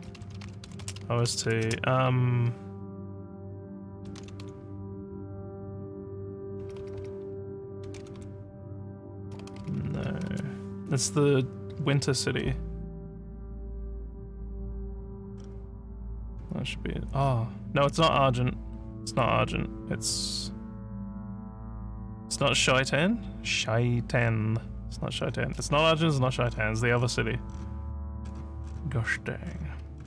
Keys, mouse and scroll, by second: 0.0-2.0 typing, 3.8-4.9 typing, 7.6-8.7 typing, 14.6 scroll down 2, 15.4 scroll down 1, 16.3 scroll up 2, 17.2 scroll down 2, 20.1 scroll up 1, 24.2 scroll down 1, 25.2 scroll down 1, 26.0-26.6 scroll down 2, 27.0 scroll down 1, 27.5 scroll down 1, 28.2 scroll down 1, 28.6 scroll down 1, 29.0 scroll down 1, 29.1 scroll down 1, 29.5 scroll down 1, 29.6 scroll, 30.0 scroll down 1.